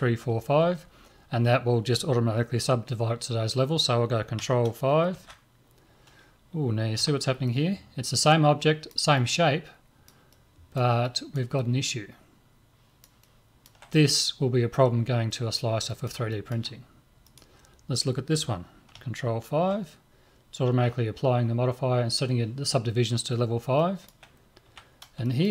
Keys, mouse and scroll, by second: 0.1-4.3 middle drag, 5.2 ctrl+5, 7.0 a, 7.5-15.0 middle drag, 15.3-18.0 middle drag, 17.3 right click, 19.6 ctrl+5, 23.8-25.5 middle drag, 24.7 a.